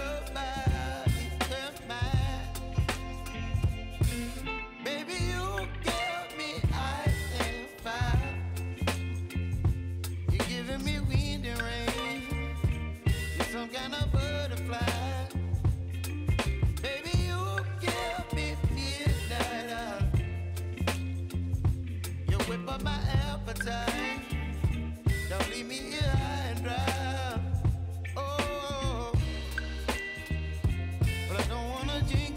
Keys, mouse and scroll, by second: 0.3-6.4 drag, 6.4 Return, 8.6 click, 14.3 click, 17.1 click, 21.4-22.7 typing, 23.9 Return, 24.9-31.6 typing, 29.3 Return.